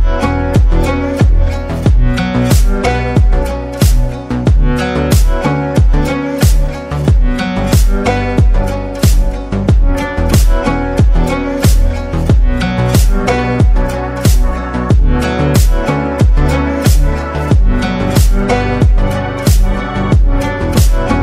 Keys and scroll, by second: 8.5 ctrl+v.